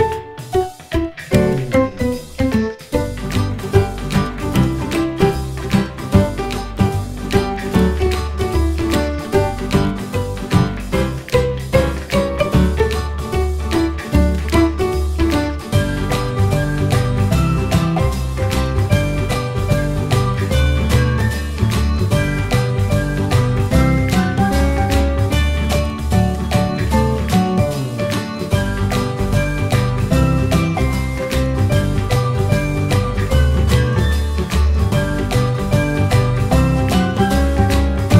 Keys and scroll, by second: 0.6 ctrl+g, 1.5 ctrl+z, 2.9 ctrl+g, 21.3 ctrl+q.